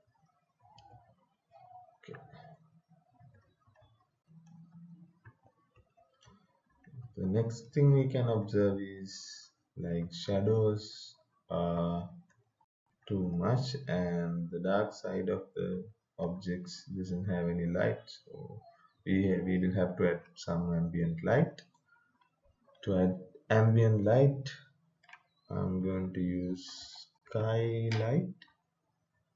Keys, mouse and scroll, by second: 2.5 right click, 2.9-19.8 typing, 21.2-21.9 typing, 24.0 click, 26.4-27.8 typing.